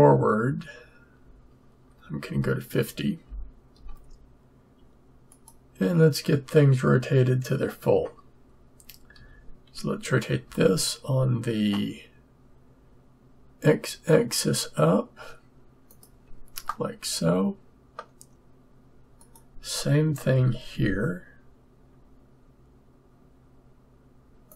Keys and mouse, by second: 2.3 Left, 3.2 Left, 9.1 r, 16.8-18.7 drag, 20.3 r.